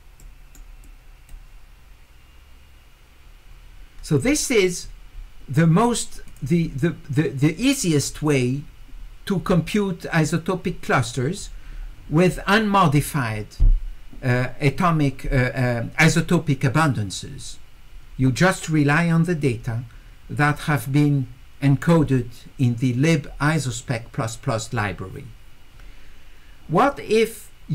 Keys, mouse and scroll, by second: 0.2 right click, 0.8 click, 12.4 click.